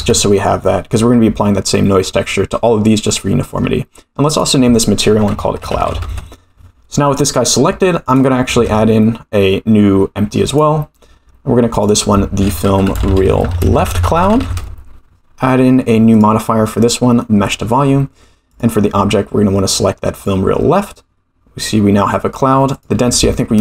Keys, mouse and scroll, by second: 3.1-3.6 middle drag, 4.3-6.7 drag, 7.1 click, 8.0 click, 8.5 shift+a, 11.7 click, 11.8-15.1 drag, 13.2 e, 16.1 click, 16.8-17.5 drag, 18.5 click, 22.7-23.6 drag.